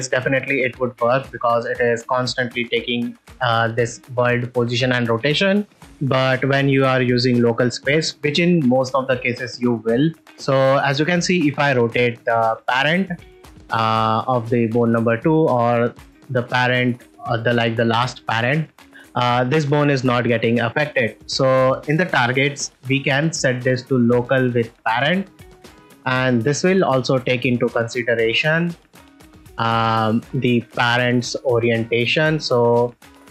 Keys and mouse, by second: 3.1 click, 10.3 r, 10.4 r, 13.0 right click, 15.3 click, 15.7 r, 15.9 r, 22.3-25.1 drag, 26.7 r, 28.4 r, 28.6 r.